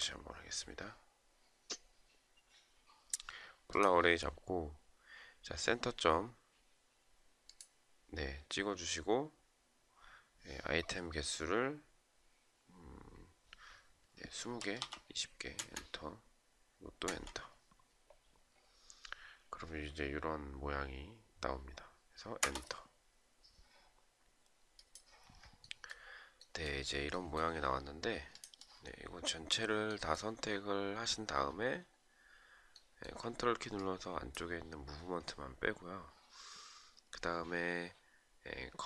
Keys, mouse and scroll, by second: 14.7 Return, 16.4 Return, 21.7 Return, 33.1 ctrl+click, 34.1-34.7 ctrl+scroll down 1.